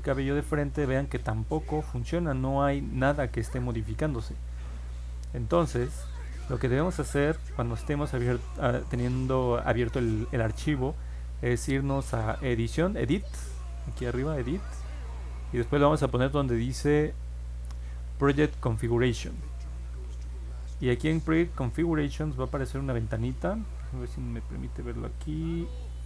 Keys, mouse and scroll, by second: 5.5 click, 5.9-6.5 scroll down 4, 7.3 alt+middle click, 12.3 click, 19.2 click, 22.5 click, 25.0 click.